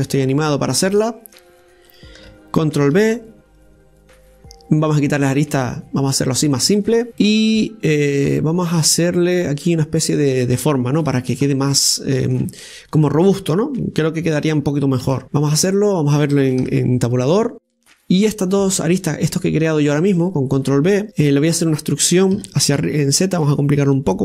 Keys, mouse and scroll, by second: 0.5 right click, 1.0-3.8 alt+shift+right drag, 3.8 ctrl+b, 7.1 click, 7.5 scroll down 1, 8.1-11.1 middle drag, 12.0 Tab, 12.3-12.8 scroll up 1, 12.8-15.2 middle drag, 15.2 z, 16.4-17.5 middle drag, 17.5 Tab, 18.3 scroll down 1, 18.6 middle click, 19.4-20.6 right drag, 20.6 click, 21.4 shift+right click, 21.7-23.2 middle drag, 23.2 e.